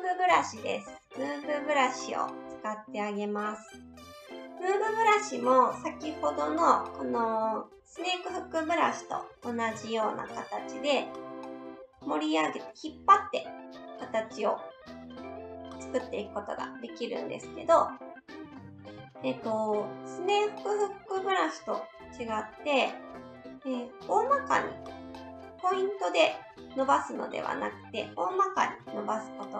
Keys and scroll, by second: 9.7 s, 18.6 ctrl+z, 18.9 ctrl+z, 28.7 ctrl+z.